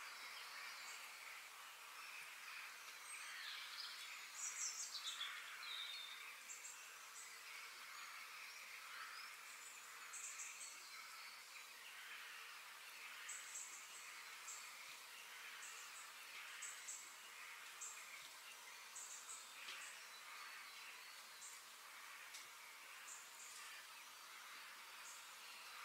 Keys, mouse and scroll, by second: 3.2 KP_3, 3.6-4.2 scroll up 4, 4.2-6.8 shift+middle drag, 8.0 KP_3, 8.8 g, 19.8 g, 22.6 middle click, 23.2 scroll down 1, 23.4-25.3 middle drag, 25.4-25.8 scroll up 2.